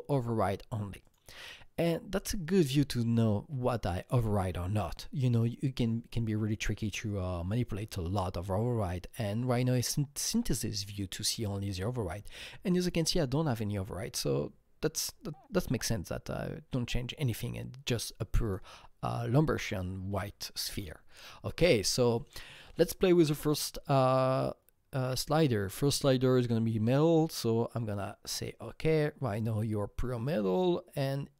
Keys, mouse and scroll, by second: 1.0 click, 2.2-2.5 scroll up 1, 17.1 click, 17.1-18.0 scroll up 1, 18.4 click, 26.9-29.0 drag.